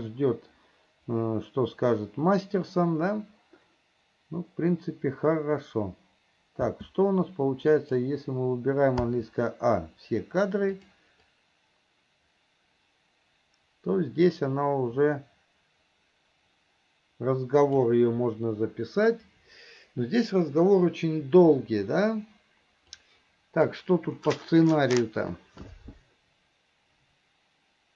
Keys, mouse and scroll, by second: 8.0 click, 11.0 click, 11.6-18.1 drag, 23.2 click.